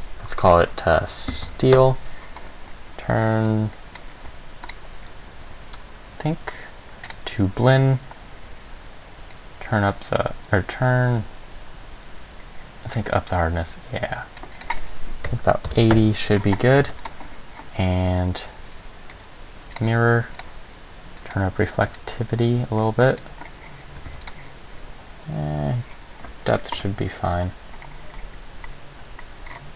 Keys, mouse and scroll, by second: 3.7 click, 4.9 click, 9.5 click, 13.8 click, 14.8 click, 17.0 ctrl+s, 18.0 scroll down 2, 19.3-20.0 scroll down 1, 20.0 click, 20.6 click, 21.4 click, 21.9 click, 23.0 click, 24.3 ctrl+s.